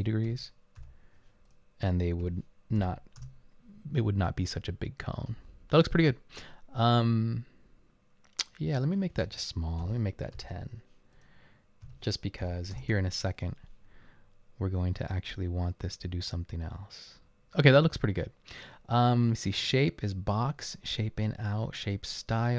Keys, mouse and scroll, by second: 0.3-0.8 typing, 2.1-2.8 typing, 3.2 Return, 9.9-10.4 typing, 11.8-12.4 typing, 12.8 Return.